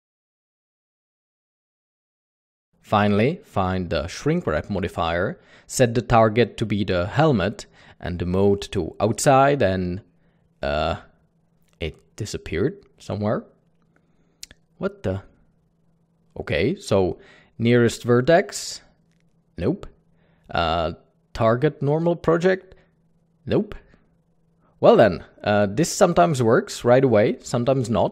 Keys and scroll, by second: 0.0 Tab, 0.3 Tab, 1.2 ctrl+l, 1.8 ctrl+i, 2.8 typing, 15.2 typing.